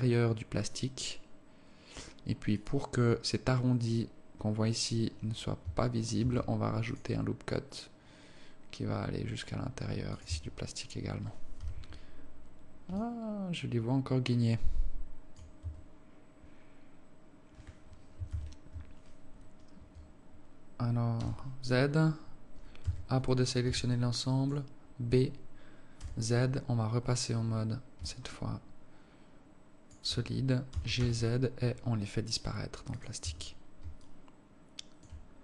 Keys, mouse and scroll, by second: 6.6 ctrl+r, 10.6 Tab, 12.0 z, 13.4 alt+click, 16.0 Tab, 18.6 ctrl+KP_1, 23.4 a, 24.2 b, 26.4 z, 28.4 alt+click, 31.0 g, 33.6 Tab, 34.4 alt+click.